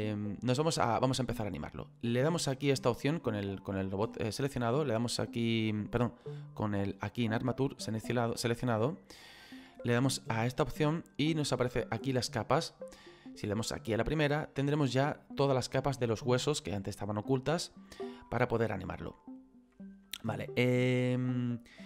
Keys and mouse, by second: 3.7 right click, 7.0 click, 10.4 click, 14.1 click, 16.0 middle click, 18.3 middle click.